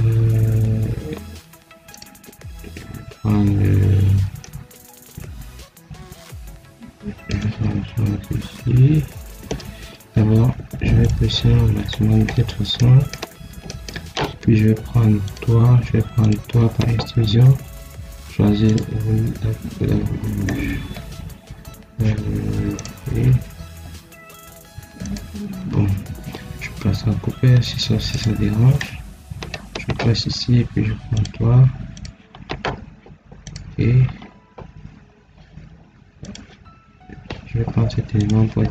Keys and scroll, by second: 9.8 Escape, 26.0 Escape.